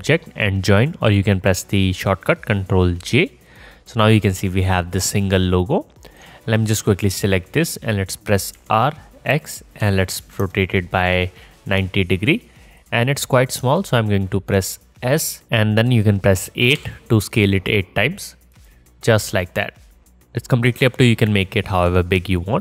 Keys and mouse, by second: 3.6-6.6 middle drag, 6.6 click, 6.7-11.8 middle drag, 8.6 r, 15.4 ctrl+z, 15.4 s, 19.5 middle click, 19.8-22.6 alt+middle drag.